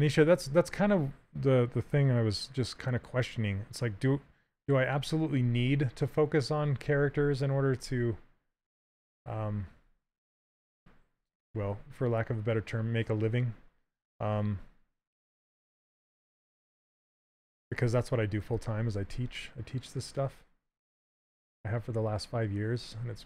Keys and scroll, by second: 5.1 ctrl+h, 16.5 s, 18.7 s.